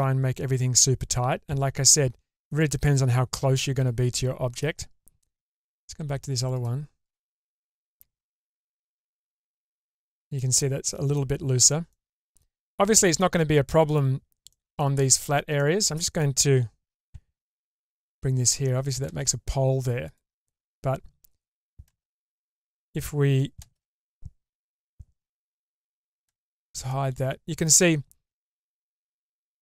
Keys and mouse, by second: 1.0 Tab, 2.4-4.6 middle drag, 6.5 click, 7.0 click, 8.0 Tab, 8.8 Tab, 9.4 click, 9.8 Tab, 10.4 middle click, 11.9 click, 13.2 middle click, 14.5 middle click, 15.6 middle click, 17.0 k, 20.0 click, 21.8 shift+space, 22.6 click, 23.6 shift+space, 24.8 Tab, 25.5 click, 26.2 shift+space, 26.9-27.6 middle drag, 28.5 shift+middle click, 28.9-29.6 middle drag.